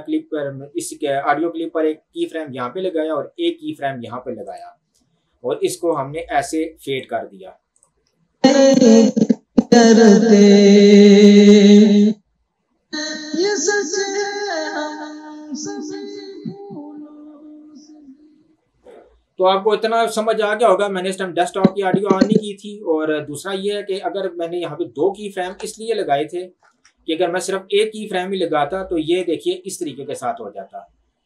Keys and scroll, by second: 8.5 space, 18.8 space, 25.8 ctrl+z.